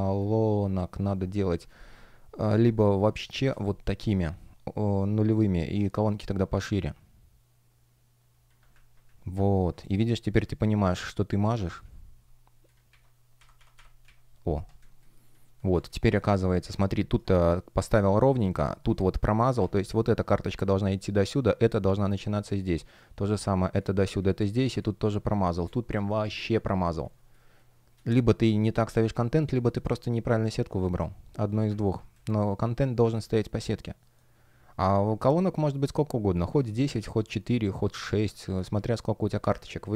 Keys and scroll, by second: 3.4 Return, 10.0 space, 12.8 Down, 13.3 Up, 13.9 Down, 14.7 space, 16.1 shift+p, 16.3 space, 17.0 shift+p, 25.1 space, 27.0 space, 28.7 shift+o, 30.5 shift+g, 32.1 space, 33.3 shift+o, 33.9 shift+g, 34.9 space, 37.2 shift+o, 38.5 space, 39.9 space.